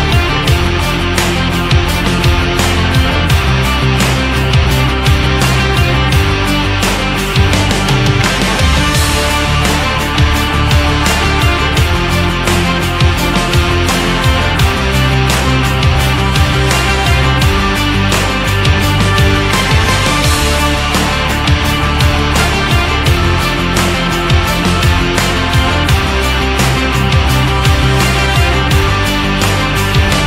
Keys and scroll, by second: 22.1 ctrl+s.